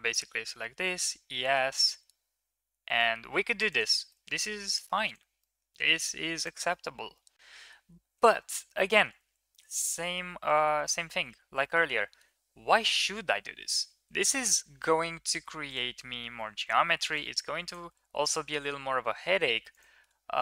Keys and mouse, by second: 0.7 e, 3.9-4.7 middle drag, 5.2-5.8 middle drag, 5.8 Tab, 6.6-7.5 middle drag, 8.1 ctrl+z, 8.3 ctrl+z, 8.5 ctrl+z, 8.6 ctrl+z, 8.7 ctrl+z, 9.6 ctrl+z, 9.8 middle click, 10.4 ctrl+z, 10.5 ctrl+z, 11.4 shift+middle drag, 13.9 KP_1, 16.5 1, 17.0 right click, 17.7 g, 19.8 Tab.